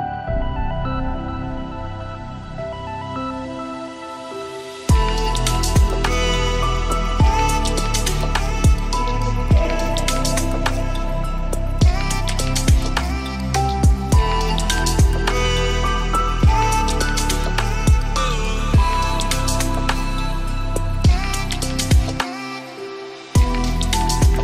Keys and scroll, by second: 10.2 ctrl+g, 15.4 ctrl+z, 16.6 ctrl+g, 20.3 ctrl+d.